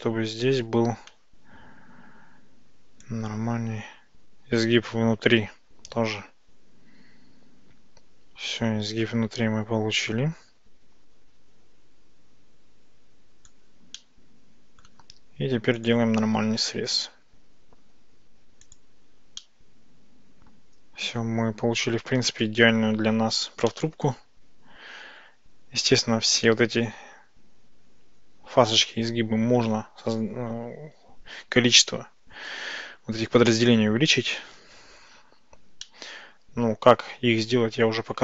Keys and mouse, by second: 3.1-13.6 drag, 14.0 middle click, 15.8 click, 18.7 click, 19.4-22.4 middle drag, 23.8-26.5 middle drag, 35.9-38.2 middle drag.